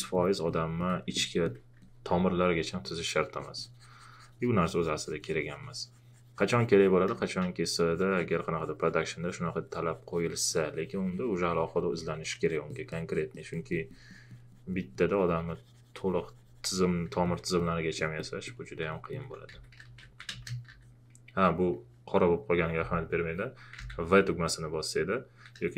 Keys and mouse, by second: 0.8 alt+click, 1.1 alt+click, 1.8 alt+click, 7.1 space, 16.4 click, 18.0 alt+click, 18.9 alt+shift+click, 19.3-20.7 typing, 23.8 v.